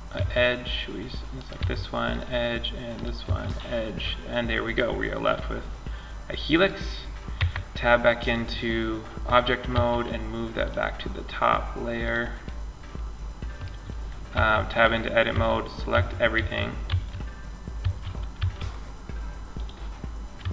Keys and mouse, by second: 0.6-3.2 drag, 0.8 x, 2.5 x, 3.2 middle click, 6.6 Tab, 8.9 m, 13.5 Tab, 14.5-17.6 typing, 18.8-20.0 drag, 19.6 a, 20.0 a.